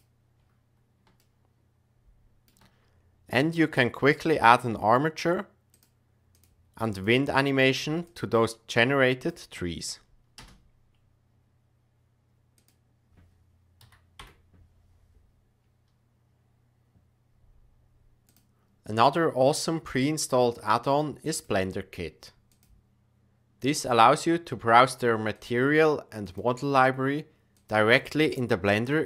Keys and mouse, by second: 0.0 click, 1.1-2.4 shift+middle drag, 3.2-4.3 drag, 6.3 click, 6.9 drag, 10.3 space, 12.5-18.2 drag, 23.8 click, 25.3-26.3 drag, 27.5-29.0 drag.